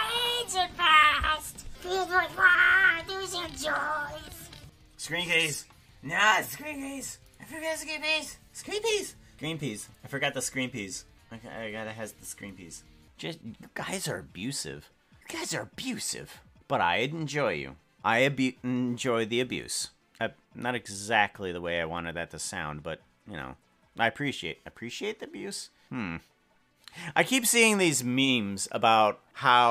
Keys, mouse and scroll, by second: 2.7-3.9 drag, 4.3 click.